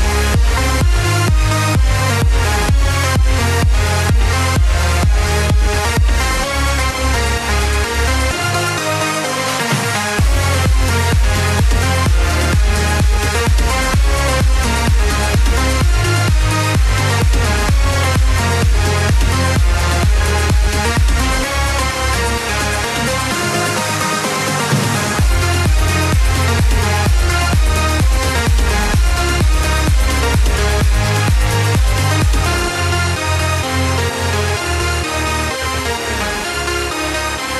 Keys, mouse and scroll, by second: 4.0-7.1 middle drag, 9.3-11.2 alt+drag, 11.2 g, 15.6-18.0 alt+drag, 18.0 r, 21.0 g, 28.1-29.9 alt+drag, 29.9 r, 32.5 s, 36.7-37.5 drag.